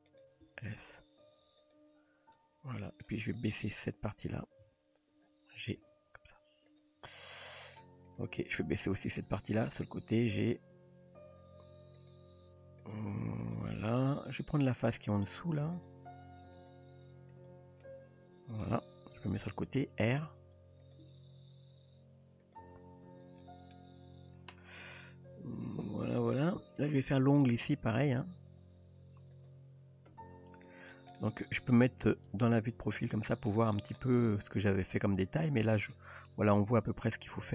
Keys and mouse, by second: 0.5 s, 2.4-3.0 middle drag, 3.5 click, 4.6 KP_3, 5.8 g, 7.1-7.8 middle drag, 9.2 KP_3, 10.3 g, 13.5 shift+click, 14.8 click, 16.5 click, 17.8-18.6 middle drag, 19.1 KP_3, 20.1 r, 21.0 g, 23.1 Tab, 23.7-26.9 middle drag, 28.6 click, 28.8 ", 30.1 Tab, 31.2 shift+middle click, 32.3 KP_3, 33.3 middle drag, 34.9-35.6 middle drag, 35.9-36.3 shift+middle drag.